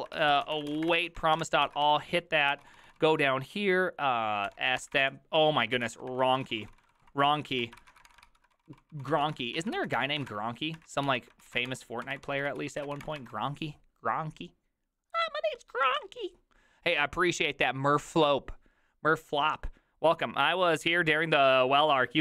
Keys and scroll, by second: 0.0-3.2 typing, 1.7 ctrl+c, 4.2-5.0 typing, 5.0 ctrl+c, 5.8 ctrl+c, 6.2 ctrl+v, 6.5-13.4 typing.